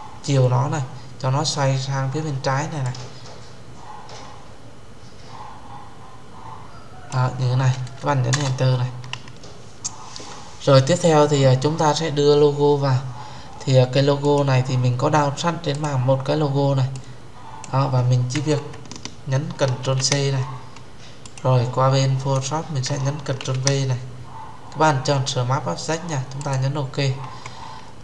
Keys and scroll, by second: 8.2 Return, 19.7 ctrl+c, 23.3 ctrl+v.